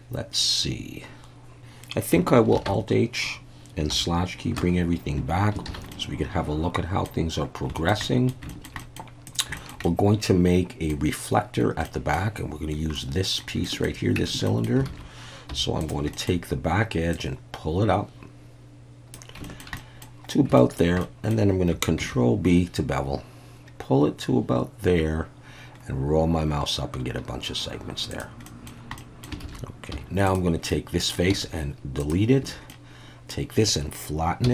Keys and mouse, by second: 2.5 alt+h, 3.9 /, 5.7 alt+a, 5.9-7.1 middle drag, 7.7 shift+middle drag, 8.0 middle drag, 8.5 shift+middle drag, 8.8 middle click, 9.3 click, 9.6 shift+middle click, 9.8-10.9 middle drag, 11.8 middle drag, 13.0-13.4 middle drag, 13.6 shift+middle click, 14.2 Tab, 14.5 middle click, 14.9 alt+a, 15.5 3, 16.1 shift+middle click, 17.2-19.1 drag, 19.4 shift+middle click, 19.8 middle click, 20.6 shift+middle click, 21.0 middle click, 22.0 ctrl+b, 28.1 click, 28.5 middle click, 29.0 middle click, 29.4 alt+a, 29.9 3, 30.7 middle click, 31.3 x, 32.4 a, 32.7 middle click.